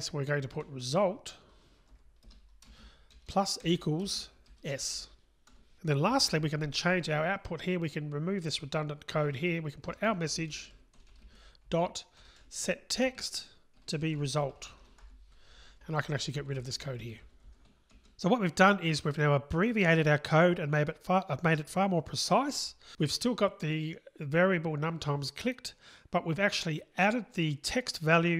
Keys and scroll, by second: 2.3 Return, 2.9 Return, 11.2 Return, 17.9 Delete.